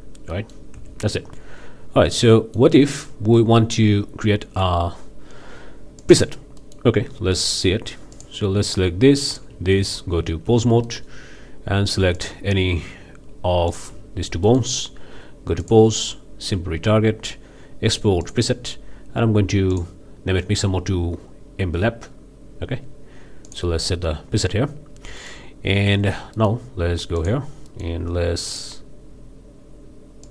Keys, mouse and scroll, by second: 0.3-0.7 middle drag, 0.7 Tab, 1.1 scroll up 1, 1.3 middle click, 2.1-2.8 middle drag, 3.4 middle click, 3.4 scroll up 1, 4.2-4.8 middle drag, 6.0 click, 6.6-7.0 middle drag, 7.4-7.7 middle drag, 8.1 drag, 9.3-9.6 shift+drag, 9.8 shift+Tab, 10.8-11.2 middle drag, 11.3 scroll up 2, 12.1-12.4 drag, 13.7 shift+middle drag, 14.4 middle click, 15.6 click, 18.2-18.5 drag, 19.7 drag, 23.5 click, 24.9 scroll down 1, 25.2 drag, 25.9 Tab, 26.3-26.7 drag, 27.2 drag, 27.7-28.0 middle drag, 28.5 drag, 30.2 click.